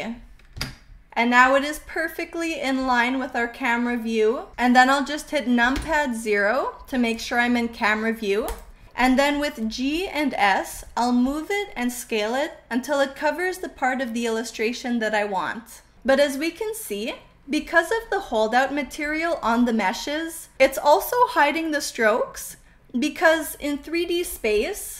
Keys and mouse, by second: 0.5 KP_Enter, 0.9-4.3 middle drag, 5.7 KP_0, 10.1 g, 11.1 click, 11.4 s, 12.4 click, 12.7 g, 23.3-24.2 middle drag.